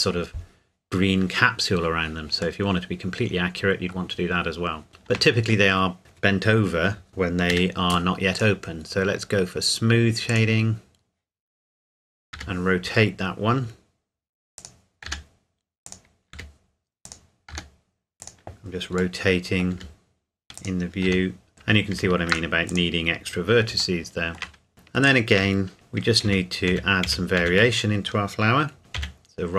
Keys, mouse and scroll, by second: 2.6 middle click, 4.3-4.9 scroll down 1, 4.9 scroll up 1, 5.1 Tab, 8.3 click, 12.3 r, 12.9-13.8 scroll down 1, 14.6 click, 15.1 g, 15.9 click, 16.3 r, 17.1 click, 17.5 g, 18.2 click, 19.2 middle click, 19.7 r, 20.6 click, 21.1 g, 21.5 click, 21.9 ctrl+r, 22.3 ctrl+click, 22.7 click, 24.0 shift+middle click, 24.7-25.1 scroll down 1, 25.1 shift+click, 25.7 Tab, 26.3 a, 26.7 a, 27.1 a, 27.4 a, 28.8 a, 29.0 a.